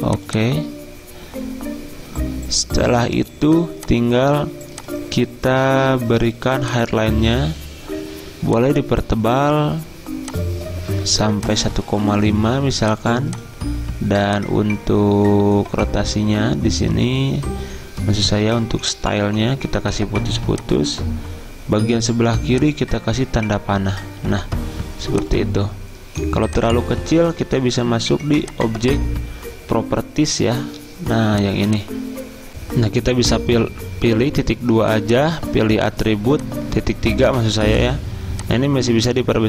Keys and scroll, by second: 32.5 F9.